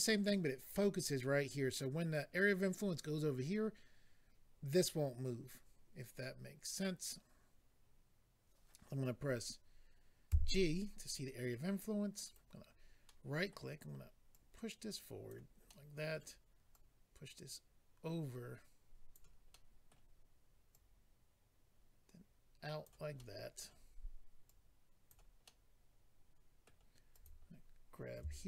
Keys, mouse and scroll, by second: 12.2 right click, 13.0 middle click, 14.3 click, 15.6 middle click, 16.7 click, 19.5 middle click, 20.7 click, 23.2 middle click, 24.4 click, 25.4 middle click, 27.1 click, 27.2 click.